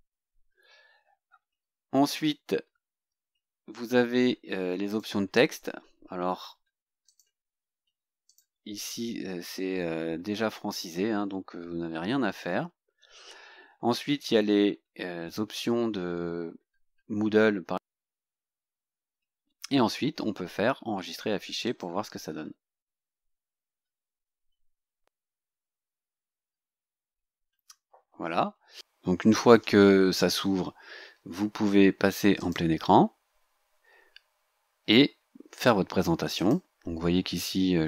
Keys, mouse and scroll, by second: 1.3-1.6 scroll down 2, 2.7 scroll down 2, 3.3 scroll down 2, 4.9 click, 5.7-6.5 scroll down 4, 7.1 click, 8.3 click, 9.1-9.4 scroll down 2, 10.1 scroll down 2, 10.9 scroll down 2, 11.5 scroll down 2, 12.2-12.5 scroll down 2, 12.8 scroll down 2, 13.4-16.5 scroll down 16, 16.6-17.0 scroll up 2, 18.0 click, 18.6-18.9 scroll down 2, 19.5-19.8 scroll down 2, 21.7 click, 28.1-31.1 scroll down 2, 31.1-31.4 scroll down 1, 32.4 click, 36.3 click.